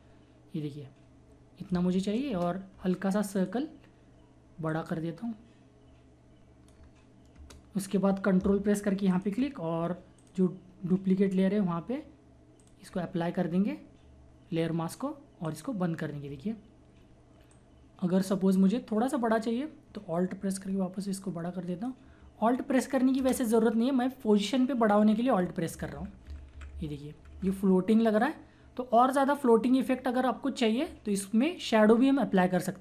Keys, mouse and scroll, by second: 2.3 Return, 3.4 click, 3.6 typing, 4.7-7.3 drag, 7.3 Return, 9.1 ctrl+click, 10.4 typing, 12.6 click, 15.4-20.5 drag, 20.5-23.2 drag, 22.9 typing, 23.2 Return, 25.7 Right, 26.2 Down, 28.2 click.